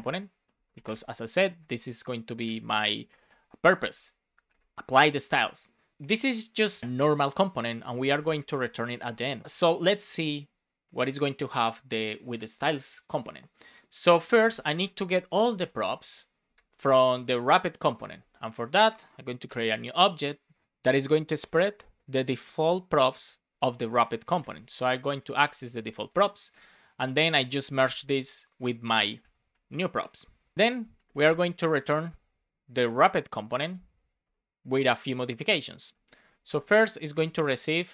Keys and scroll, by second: 0.5 BackSpace, 1.5 space, 2.5 shift+9, 3.8 space, 4.3 shift+., 4.4 shift+space, 5.9 Return, 6.8 Return, 8.2 space, 8.5 shift+w, 9.4 Tab, 14.6-19.4 typing, 20.9 BackSpace, 22.3 Down, 22.8 Return, 25.6 shift+p, 26.4 space, 30.5 space, 31.3 space, 31.7 shift+9, 33.4 shift+w, 34.2 Return, 35.2 Return, 35.8 space, 36.9 shift+s.